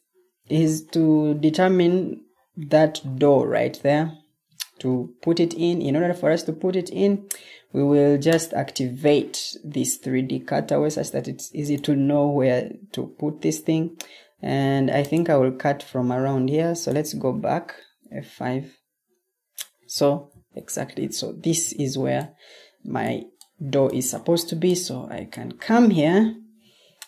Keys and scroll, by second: 4.1 Escape, 17.9 F5, 20.2 o, 21.5 o, 26.5 Escape.